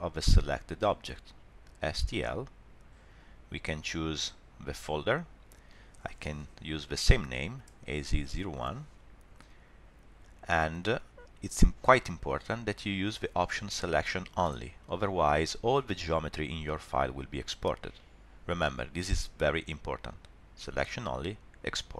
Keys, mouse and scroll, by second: 2.1 click.